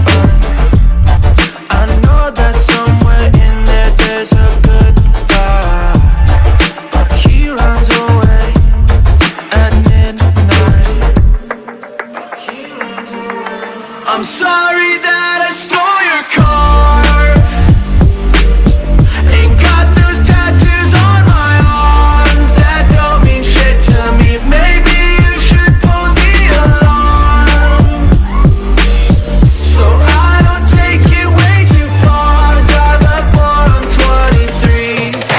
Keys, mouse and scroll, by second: 0.3 ctrl+space, 0.4 click, 1.0 ctrl+alt+scroll down 1, 4.4 click, 5.0 ctrl+0, 6.9 ctrl+0, 7.3 ctrl+a, 8.9 click, 11.6-16.5 drag, 16.5-19.2 drag, 19.6-24.4 drag, 25.6-32.0 drag, 32.0-35.3 drag.